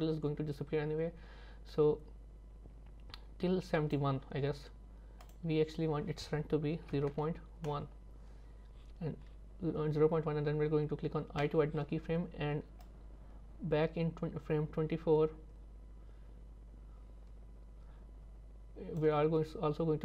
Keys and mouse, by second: 5.3-7.1 drag, 12.9-19.1 drag.